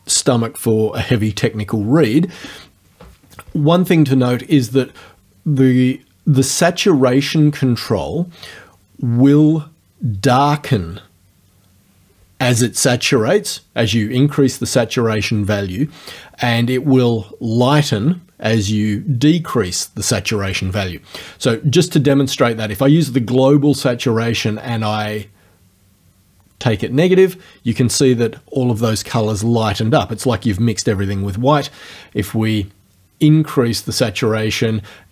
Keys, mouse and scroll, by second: 24.9-35.1 drag.